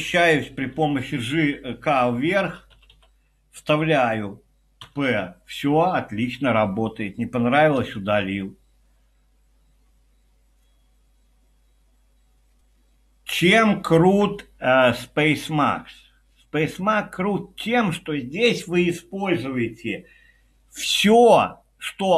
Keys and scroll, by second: 1.0 j, 2.1-3.4 typing, 4.8 typing, 7.8 u.